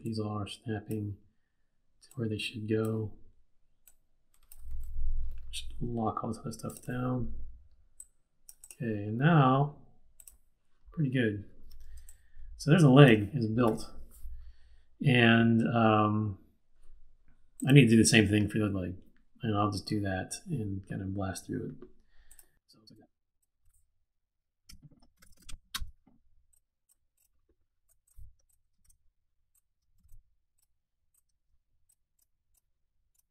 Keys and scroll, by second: 4.7 super+z, 12.0 space, 24.6 F8, 24.9-25.9 typing, 28.8 shift+super+d, 29.9 shift+super+d.